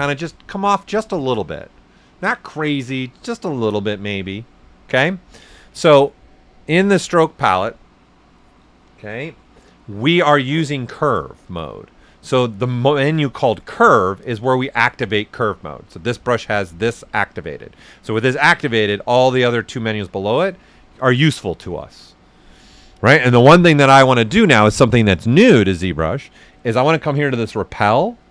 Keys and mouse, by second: 4.8 ctrl+z, 6.5 click, 13.4 click, 16.4 click, 27.2 click.